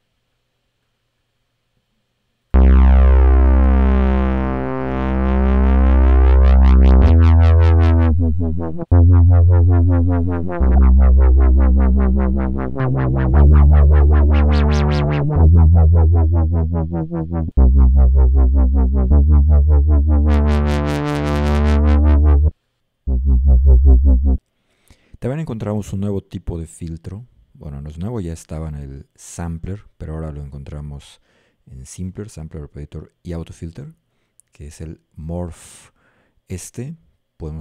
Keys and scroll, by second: 2.6 a, 7.0 d, 8.9 f, 10.6 a, 13.4 s, 15.4 d, 17.6 a, 19.1 s.